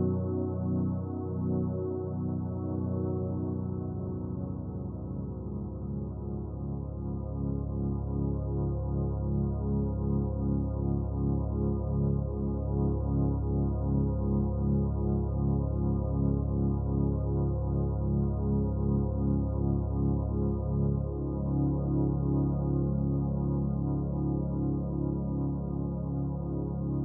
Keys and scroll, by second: 16.2 ctrl+t.